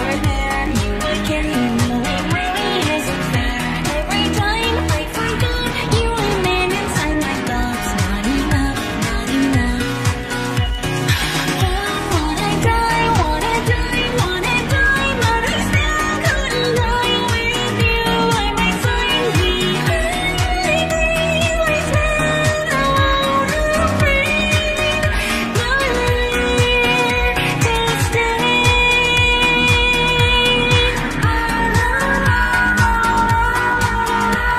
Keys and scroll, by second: 0.2 ctrl+d, 2.8 p, 10.6 p, 28.3 p.